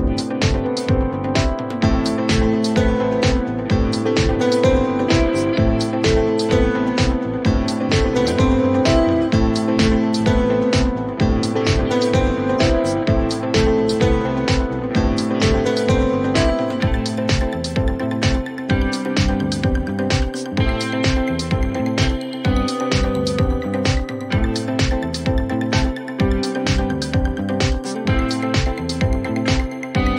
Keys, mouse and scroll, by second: 0.9 click, 1.1-2.0 typing, 3.7 click, 4.2-4.6 typing, 6.2 click, 7.5-7.9 typing, 10.6 click, 13.4 click, 14.7-17.1 typing, 18.9 click, 19.5-20.4 typing, 23.0 click, 24.1-24.4 typing, 25.9-26.7 typing, 26.6 middle click, 28.3 click, 29.1-30.0 typing.